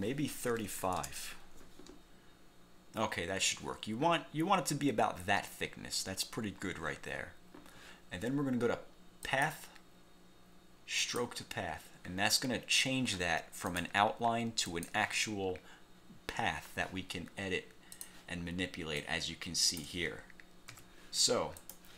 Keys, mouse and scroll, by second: 0.5-1.4 typing, 9.4 click, 11.1 click, 13.8 click, 14.8 click, 18.1 click, 19.1 click, 20.8 ctrl+z, 21.8 click.